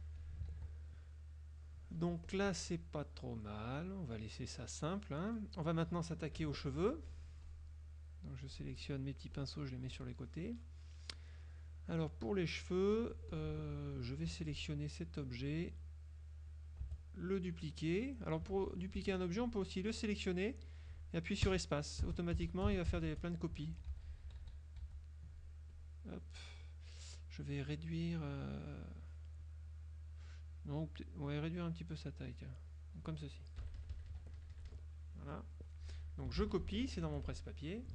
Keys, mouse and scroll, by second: 0.3 ctrl+click, 0.6 ctrl+s, 1.3 click, 2.1 z, 2.3-4.1 drag, 4.7-5.9 drag, 6.5 KP_Subtract, 6.9 F1, 7.5 click, 8.5-9.7 drag, 10.0 z, 13.1 z, 13.5 click, 14.4 F2, 14.6 click, 15.5 F1, 16.6-18.7 drag, 16.9 space, 18.7 ctrl+z, 19.5 ctrl+click, 20.0-23.6 ctrl+drag, 21.6 space, 23.7 ctrl+z, 25.9 ctrl+click, 31.0-33.1 drag, 33.1 right click, 33.7 KP_Subtract, 34.3 Escape, 34.5 KP_Subtract, 37.1 F6, 37.5 click.